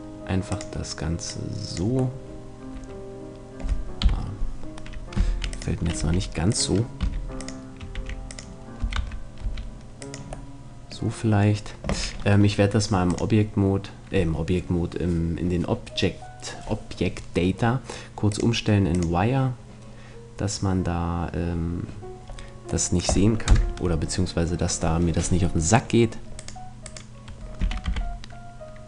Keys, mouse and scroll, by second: 2.2 middle click, 2.8 click, 3.2 middle click, 4.0 KP_3, 5.2-8.8 typing, 6.0 click, 8.7-10.5 drag, 10.5-12.2 middle drag, 13.1-15.0 drag, 18.3-20.2 drag, 22.2 middle click, 23.1 middle click, 23.5 KP_0, 23.7 middle click, 26.5-28.8 right drag, 27.6 r.